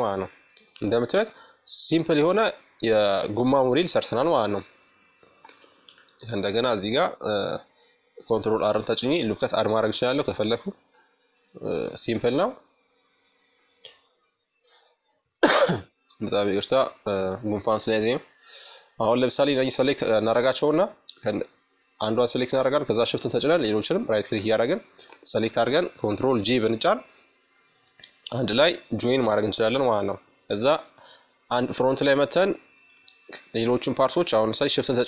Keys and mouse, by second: 1.2-2.9 middle drag, 3.0-4.7 right drag, 3.5 Tab, 6.1 ctrl+r, 8.5-10.1 middle drag, 9.9-14.8 drag, 11.6 Tab, 15.5-17.2 middle drag, 17.2-24.4 right drag, 24.2 ctrl+j, 25.7-27.7 middle drag, 27.8-29.8 drag, 28.5 KP_1, 29.8-32.5 middle drag, 32.9-35.0 drag.